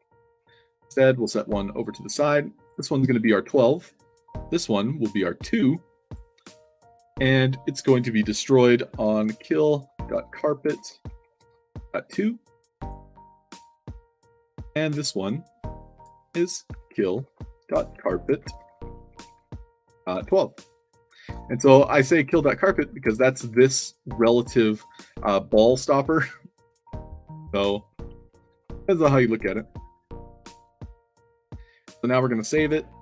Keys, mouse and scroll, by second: 0.4 shift+click, 1.4 middle drag, 2.5 click, 3.7 click, 4.6 click, 5.9 click, 8.2 click, 9.1-11.6 typing, 12.7 click, 13.9 click, 14.5 click, 15.9 click, 16.8-21.2 typing, 20.8 click, 22.3 w, 26.7-29.0 typing, 32.5 click.